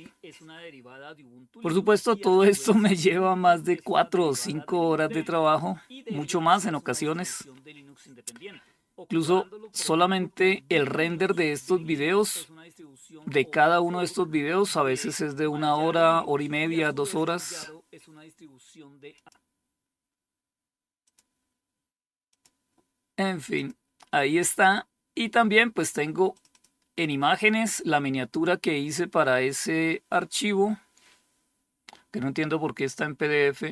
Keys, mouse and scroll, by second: 18.6 click, 20.5 click, 21.7 click, 22.9 click, 25.8 click.